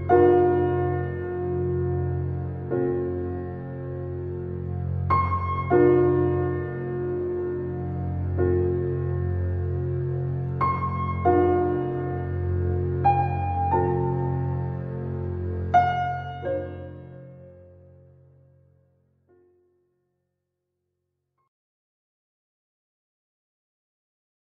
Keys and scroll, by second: 5.4 ctrl+z, 10.1 shift+space.